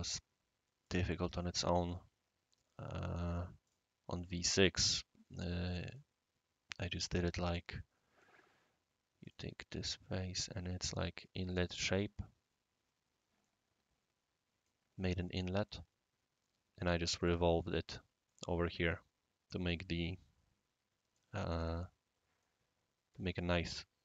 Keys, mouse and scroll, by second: 0.8 click, 3.6 click, 5.9 click, 7.5-8.2 right drag, 9.2 click, 10.4 scroll down 1, 10.8 click, 11.5 click, 11.6 click, 12.1-14.0 scroll up 2, 13.4-14.7 right drag, 17.1 click, 18.2-21.2 right drag, 22.4 right click.